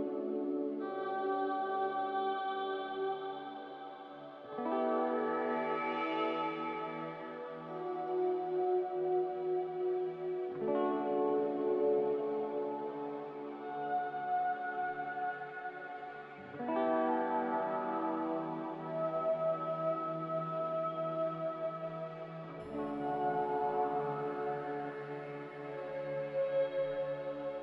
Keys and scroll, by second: 19.8-20.6 typing, 21.9-22.6 typing.